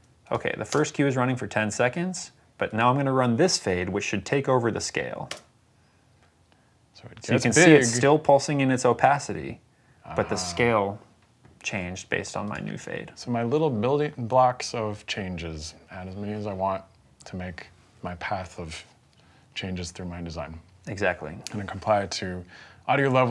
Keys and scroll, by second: 0.5 space, 5.1 space.